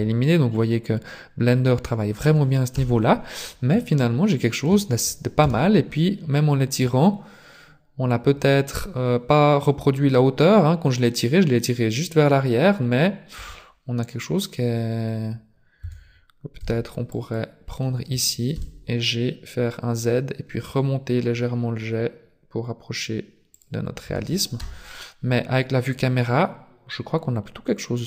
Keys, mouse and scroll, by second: 0.5 middle click, 2.7 KP_0, 3.7 shift+middle click, 5.4 KP_3, 6.8-7.2 scroll down 3, 13.4 Tab, 15.8 a, 16.7 b, 18.6 g, 24.1 Tab, 24.5 KP_0, 26.3 scroll down 2.